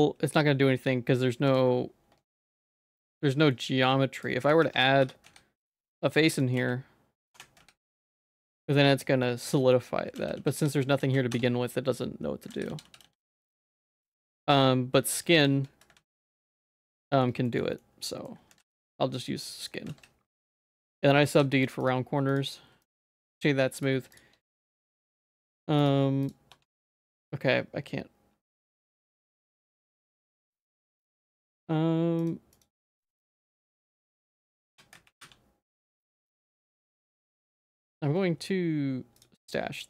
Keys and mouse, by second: 2.9 click, 3.5 middle click, 4.2 click, 4.4 click, 4.6 Tab, 5.0 1, 5.3 z, 6.0 click, 6.6 f, 7.4 Tab, 7.6 z, 7.9 middle click, 9.3 middle click, 9.7 shift+middle click, 10.2 ctrl+z, 10.4 ctrl+z, 10.6 ctrl+z, 11.0 ctrl+z, 11.3 Tab, 12.5 ctrl+z, 12.7 ctrl+z, 12.9 ctrl+z, 13.0 ctrl+z, 13.2 ctrl+z, 13.4 ctrl+z, 13.6 ctrl+z, 13.8 ctrl+z, 14.3 middle click, 15.2 click, 15.4 shift+click, 16.0 ctrl+s, 17.0 middle click, 17.5 middle click, 17.8 middle click, 18.5 ctrl+s, 19.2 middle click, 19.9 ctrl+s, 20.4 click, 20.8 middle click, 21.3 ctrl+s, 21.9 right click, 22.9 right click, 24.4 click, 24.7 Tab, 24.9 middle click, 25.4 Tab, 25.9 right click, 26.5 Tab, 26.7 middle click, 28.3 Tab, 28.7-29.8 right drag, 30.2 ctrl+s, 32.2 click, 32.5 click, 33.3 click, 34.7 Tab, 34.7 q, 34.9 a, 35.2 q, 37.5 q, 37.5 y.